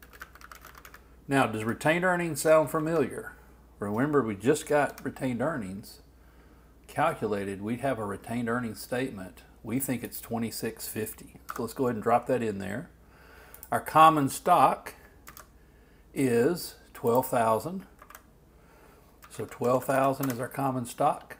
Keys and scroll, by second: 18.0 alt+Right.